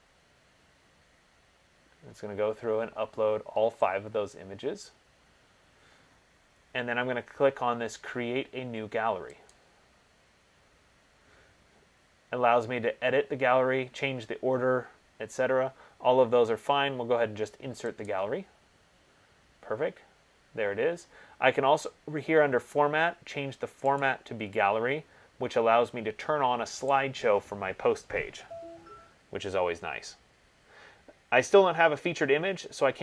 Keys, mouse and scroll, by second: 9.7 click, 18.3 click, 24.2 click, 27.1 click, 31.1 middle click, 32.1 scroll.